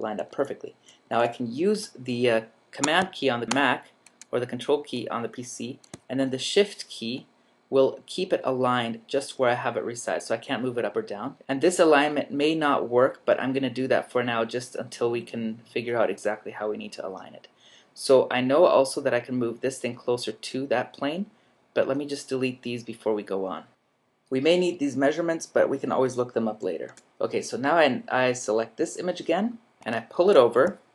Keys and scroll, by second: 0.1 super+-, 0.8 super+-.